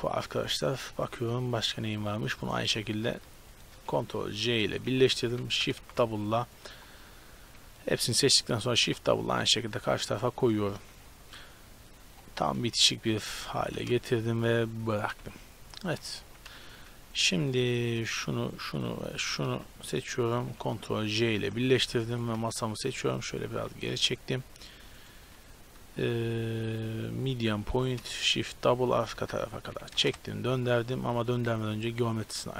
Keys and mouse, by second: 0.7 middle click, 2.5-5.7 right drag, 4.7 ctrl+j, 5.1 Tab, 5.7 a, 5.9 a, 6.2-8.2 middle drag, 8.5 middle click, 8.9 shift+d, 12.1 click, 13.3 g, 15.3 Tab, 16.3 a, 17.1-21.2 right drag, 21.2 ctrl+j, 22.2-22.7 right drag, 22.7-24.0 middle drag, 24.0-24.6 drag, 25.0-27.1 right drag, 26.7 drag, 27.9 shift+d, 29.0 r, 30.8 ctrl+z, 31.3 x, 31.8-32.5 right drag.